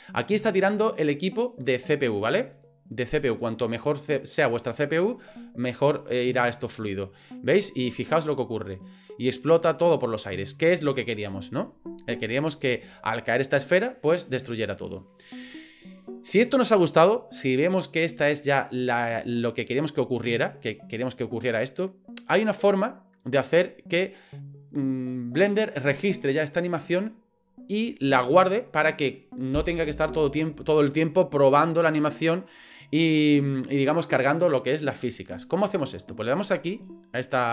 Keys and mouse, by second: 2.5 click, 12.2 click, 12.2-14.1 middle drag, 14.4 click, 14.5 middle click, 14.7 drag, 14.9 middle click, 15.1 click, 19.2-25.1 drag.